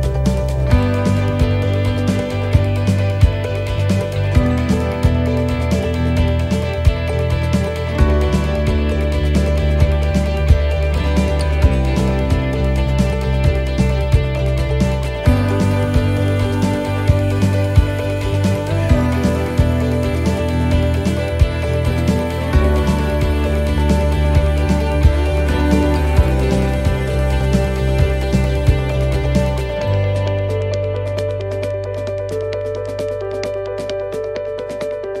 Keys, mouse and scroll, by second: 4.0 click, 7.6 click, 8.2 click, 14.8 middle click, 15.3 shift+middle click, 16.2 middle click, 17.3 shift+d, 18.8 click, 21.3 click, 26.0 click, 26.5 click, 34.9-35.2 scroll down 2.